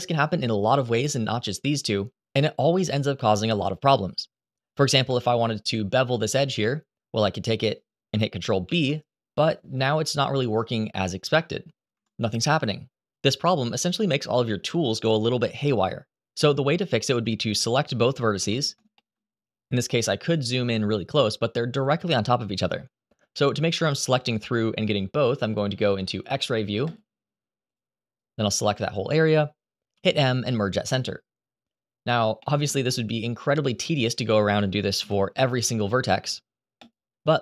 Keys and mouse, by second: 4.8 2, 5.9 click, 8.4 ctrl+b, 11.6 Escape, 18.1 1, 18.7 shift+middle click, 26.6 click, 28.0 click, 28.5 shift+middle click, 29.7 m, 32.2 middle click, 32.6 shift+middle click, 33.4 click.